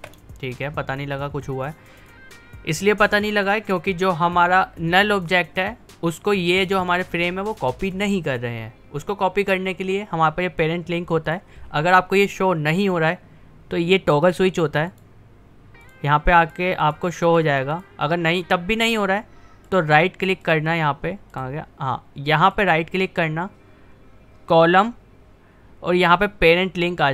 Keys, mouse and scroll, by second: 1.2-5.0 drag, 11.3 click, 15.0 click, 19.7 right click.